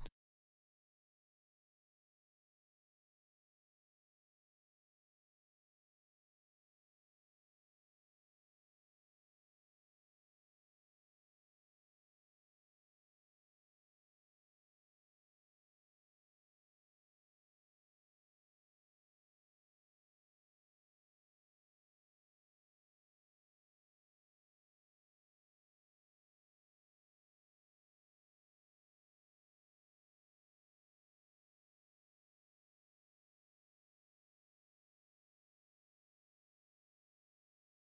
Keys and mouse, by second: 0.6-21.7 drag, 21.7-22.5 middle drag, 27.4-31.0 drag, 31.1 middle click, 32.5 KP_1, 32.7 KP_7, 36.3 middle click.